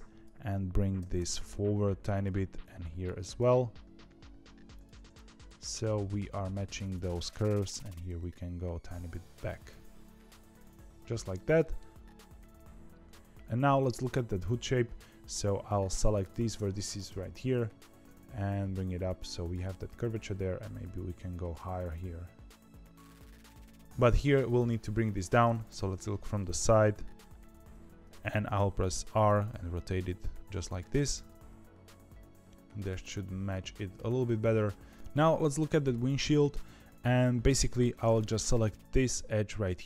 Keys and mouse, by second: 0.9 g, 2.6 click, 3.1 g, 7.3 click, 7.8 g, 9.6-11.7 middle drag, 15.3 click, 17.0 KP_1, 18.0 g, 20.0 click, 20.2 g, 23.8 KP_1, 25.6 KP_3, 26.8 ., 28.5 r, 30.9-32.8 middle drag, 33.4 shift+middle click, 34.1 middle click, 35.3 middle click, 37.6 2, 38.3 click.